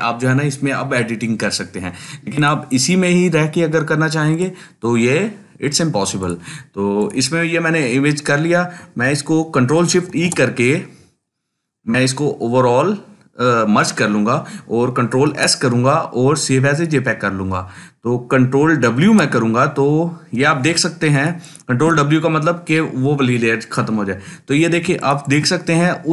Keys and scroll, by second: 10.1 ctrl+shift+e, 15.3 ctrl+s, 19.0 ctrl+w.